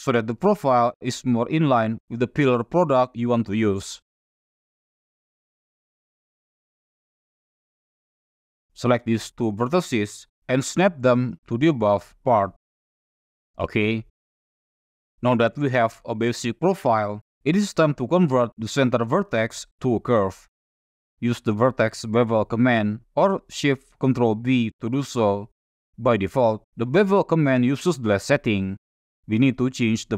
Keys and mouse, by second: 1.1 e, 2.1 click, 2.9 e, 4.2 click, 5.3 e, 5.3 x, 6.3 click, 9.3 shift+click, 10.3-11.4 drag, 12.5 click, 14.1 shift+middle click, 18.4 shift+middle click, 19.3 click, 20.6 click, 23.4 ctrl+shift+b, 24.7 click, 28.9 click.